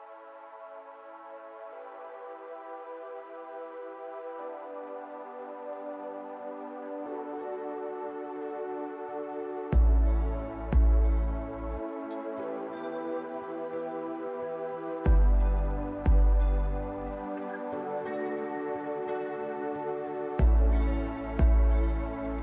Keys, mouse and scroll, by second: 0.5-2.5 typing, 2.5 Return, 4.3 click, 4.3 typing, 5.7 click, 6.5-8.1 typing, 9.3 space, 11.0-11.8 typing, 12.2 click, 13.1 scroll, 14.0 click, 15.4 click, 16.1 scroll, 17.4 7, 17.8 click, 18.3 click, 18.8 click, 19.8 click, 19.9-21.8 typing, 20.8 click, 22.1-22.4 scroll.